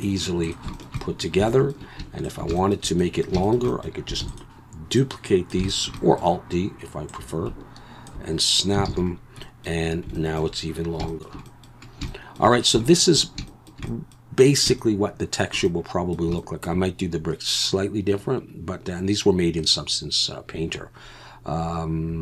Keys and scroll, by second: 4.2 shift+d, 5.6 shift+d, 8.9 alt+a.